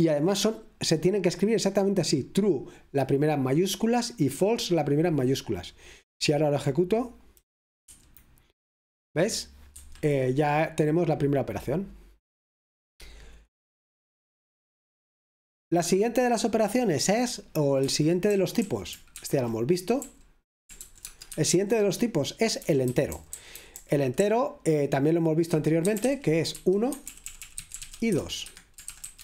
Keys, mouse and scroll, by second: 0.0 h, 0.7 h, 8.0 F5, 9.8 Escape, 18.4-29.2 typing.